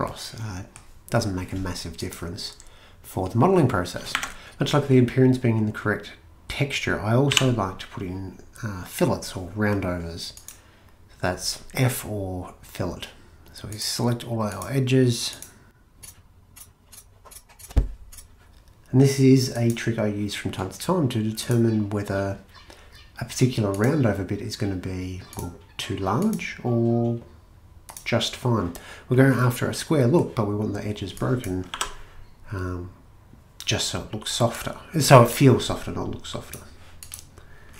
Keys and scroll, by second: 4.2 a, 7.3 f, 31.7 2.